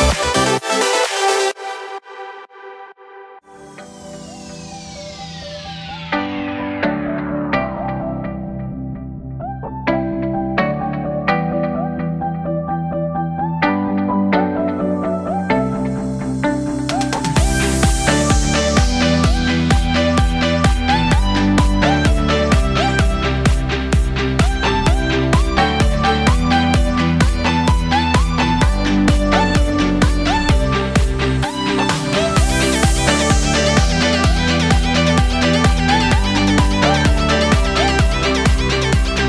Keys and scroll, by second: 1.3 Up, 2.3 Left, 2.5 Down, 2.5 Left, 2.9 ctrl+j, 7.9 Down, 10.1 Delete, 10.6 ctrl+z, 11.8 Delete, 14.2 Delete, 16.2 Up, 17.8 z, 23.5 ctrl+z, 27.4 Up, 29.7 shift+f, 30.0 shift+l.